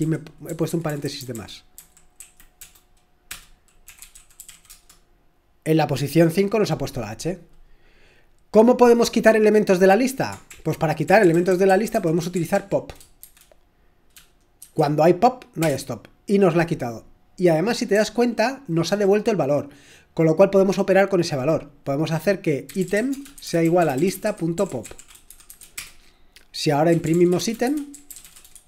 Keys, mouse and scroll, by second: 0.0 Down, 0.5 Left, 0.7 Left, 0.9 Left, 1.0 Left, 2.2 Right, 2.6 BackSpace, 3.3 Return, 3.6-4.5 typing, 4.7 Return, 5.7 typing, 7.1-7.8 typing, 10.6 ctrl+l, 10.8-13.2 typing, 14.6 typing, 15.6 Return, 17.7-18.4 typing, 22.6-28.6 typing.